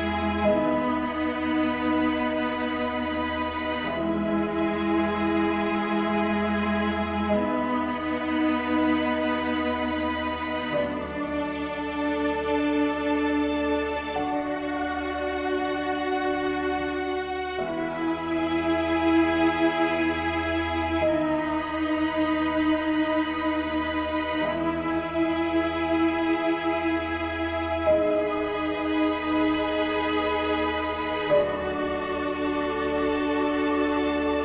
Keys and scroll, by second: 0.2 ctrl+z.